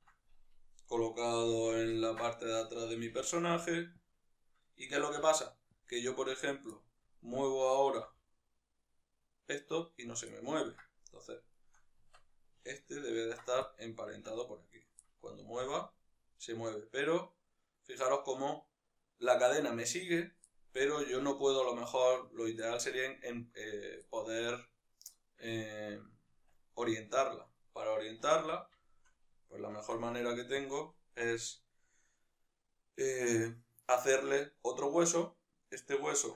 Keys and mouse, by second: 1.4 alt+q, 3.0 g, 3.9 click, 5.0 g, 5.6 click, 6.2 right click, 6.4-9.6 middle drag, 7.8 g, 9.6 right click, 10.0 ctrl+middle click, 10.8 right click, 11.2-12.0 shift+right drag, 12.0 Tab, 13.4 ctrl+p, 14.1 Tab, 14.4-14.8 right drag, 14.8-19.6 middle drag, 15.4 g, 19.6 right click, 20.2-22.1 middle drag, 20.6 g, 22.1 right click, 22.3-27.2 middle drag, 26.3 Tab, 27.2 right drag, 28.2 alt+q, 28.5-30.4 shift+middle drag, 29.4 shift+d, 30.4 click.